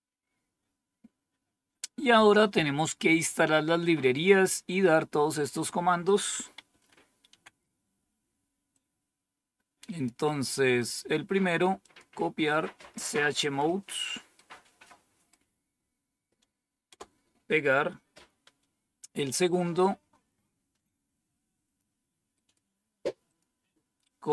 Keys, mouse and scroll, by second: 1.0-5.0 scroll down 1, 5.0-5.7 scroll down 1, 5.7 scroll down 1, 6.0 click, 6.6 Home, 7.2 End, 8.7-10.0 drag, 10.8 right click, 11.8 click, 16.8 Return, 19.7-21.8 drag, 23.2 click.